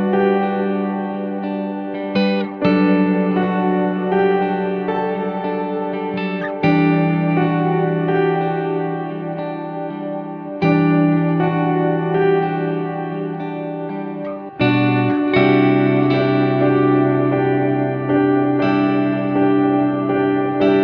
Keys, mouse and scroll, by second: 0.8-4.2 drag, 6.3-6.7 scroll down 2, 7.2 KP_3, 8.4 r, 11.2 click, 12.0 click, 12.8-14.7 drag, 17.3-18.0 scroll down 2, 18.4 scroll down 1, 18.5-19.4 shift+middle drag, 20.0 click.